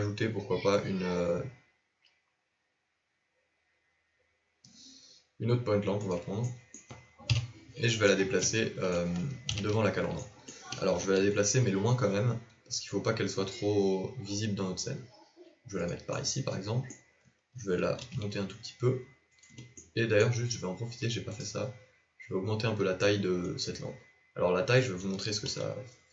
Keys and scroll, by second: 7.2 KP_7, 11.1 g, 18.2 shift+g, 25.4 z.